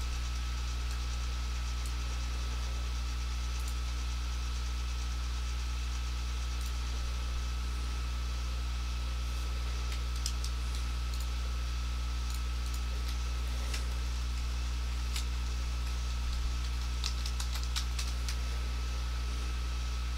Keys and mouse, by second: 1.1 click, 3.7 click, 6.7 click, 11.2 click, 13.1 Left, 13.9 Delete, 17.1-17.8 typing, 18.0 Return.